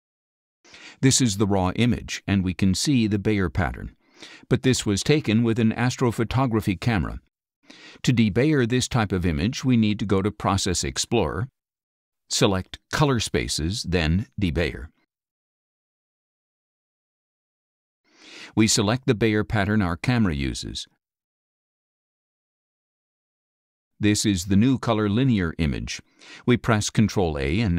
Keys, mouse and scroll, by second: 0.8 space, 0.9 click, 4.9 middle click, 5.0 scroll down 2, 7.1 middle click, 7.1-8.6 scroll up 8, 7.5 middle click, 7.9 middle click, 8.3 middle click, 13.2 click, 15.2 click, 18.2 click, 20.7 click, 22.1 click, 24.9 click, 25.9-26.6 drag, 27.5 ctrl+a.